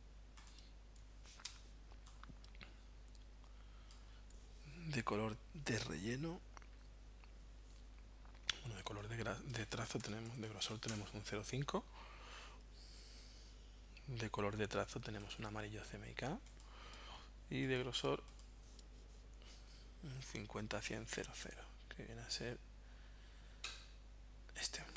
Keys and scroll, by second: 1.5 v, 9.8-10.9 typing.